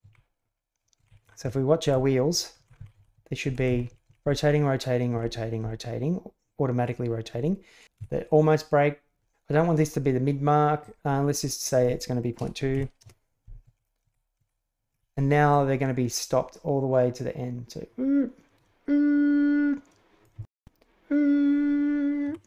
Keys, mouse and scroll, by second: 0.0 Left, 0.5 click, 0.9 Left, 1.2 Left, 1.4 Left, 1.8 Right, 2.3 Left, 2.5 Left, 2.7 Left, 2.9 Left, 3.1 Left, 3.4 Right, 3.7 Right, 3.9 Right, 4.0 Right, 4.2 Right, 5.1 Right, 5.6 Right, 7.8 Left, 7.9 Right, 10.8-14.4 drag, 13.6 Left, 14.0 Right, 14.3 Right, 15.5-20.2 drag, 20.3 shift+space, 22.2 Escape.